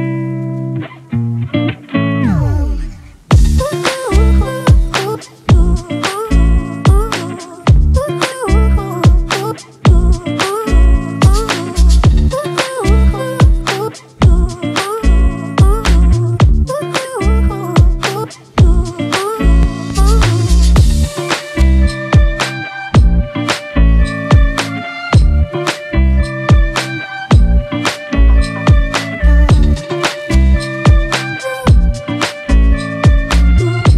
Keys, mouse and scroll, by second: 4.0-6.6 scroll down 1, 15.6 ctrl+=, 15.9 ctrl+=, 16.1 ctrl+=, 16.8 space, 19.0 double click, 22.9-24.5 typing, 29.5 typing, 33.4-33.9 typing, 33.7 double click.